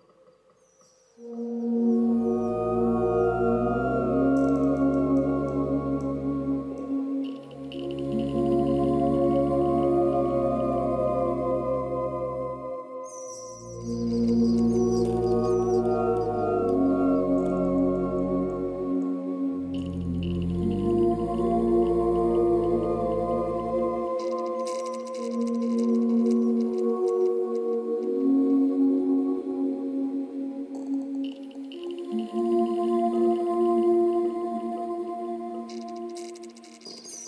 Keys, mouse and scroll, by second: 5.9 click.